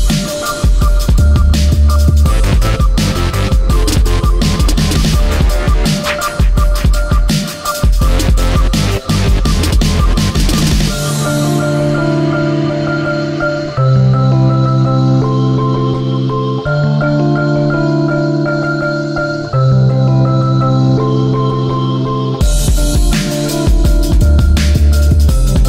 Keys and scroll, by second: 13.6 ctrl+c, 14.6 ctrl+v, 20.6 ctrl+z.